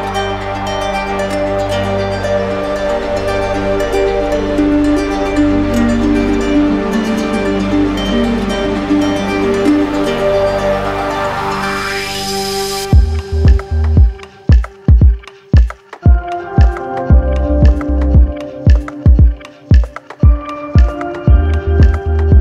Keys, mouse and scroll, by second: 0.6 alt+click, 1.4 click, 3.1 click, 3.4 ctrl+z, 7.7 click, 9.1 click, 10.9 click, 12.2 click, 13.2 click, 14.1 click, 15.2 alt+click, 16.6 click, 17.1 click, 17.4 shift+click, 18.2 alt+click, 18.3 alt+click, 19.4 click, 20.4 click, 21.0 click, 21.8 click.